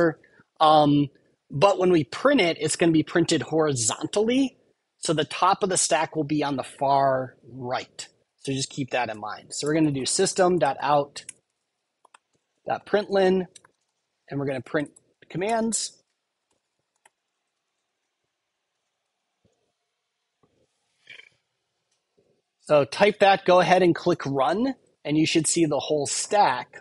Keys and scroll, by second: 9.0 Return, 15.4 Tab, 17.6 super+Right, 18.9 super+s.